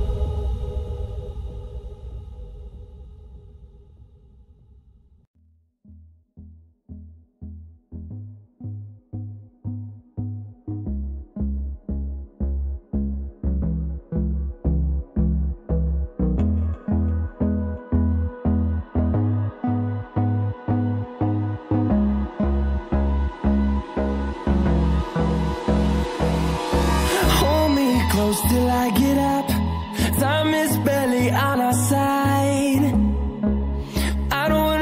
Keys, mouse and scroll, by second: 8.2 right click, 8.7 click, 13.0 click, 15.8 ctrl+End, 17.2 click, 17.8 ctrl+End, 18.8 click, 21.3-21.8 scroll up 1, 21.8-22.4 scroll down 1, 22.4 scroll down 1, 24.3 scroll up 1, 25.8 click, 27.5 scroll down 1, 27.9-28.3 scroll up 1, 28.3-28.7 scroll down 1, 28.7 scroll up 1, 29.6 click, 31.1 scroll down 1, 32.0 click, 33.3-33.7 scroll down 1, 33.7 scroll up 1, 34.1-34.5 scroll down 1, 34.5 click.